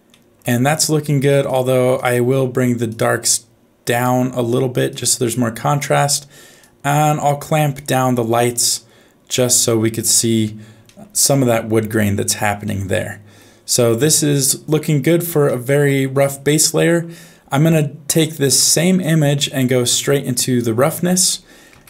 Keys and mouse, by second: 0.1 middle click, 1.4 click, 1.9 click, 2.9 click, 3.9 click, 6.6-10.1 drag, 10.9 middle click, 12.7 middle click, 15.5 shift+middle click, 16.5 middle click, 19.2-20.6 drag, 21.7 shift+a.